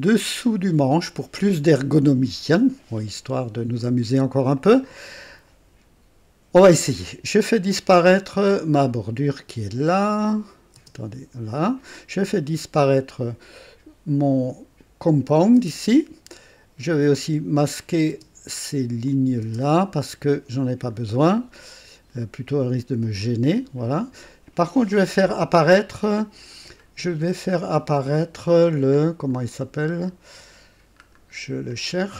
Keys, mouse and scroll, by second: 0.5-3.6 drag, 3.8 right click, 4.5 click, 10.2 click, 10.7 space, 10.8 space, 11.9 click, 15.5 space, 15.6 space, 17.7 click, 17.7-18.1 typing, 19.0 click, 19.4 typing, 20.6-21.0 scroll down 1, 21.3 click, 22.7 scroll up 1, 26.7-27.1 scroll up 2, 28.4-29.0 scroll down 2, 29.4 scroll down 2, 31.0 scroll up 2, 31.6 scroll down 2.